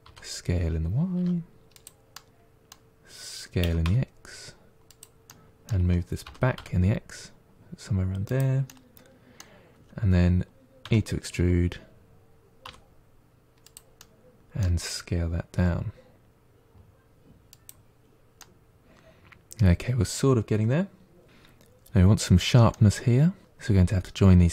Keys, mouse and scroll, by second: 2.0-3.5 middle drag, 3.5 s, 5.2-6.2 middle drag, 6.2 g, 8.6-10.7 middle drag, 10.7 e, 13.9-15.5 middle drag, 15.5 s, 18.0 scroll down 1, 18.3-21.2 middle drag, 21.2-22.0 scroll up 3, 22.6-24.2 middle drag.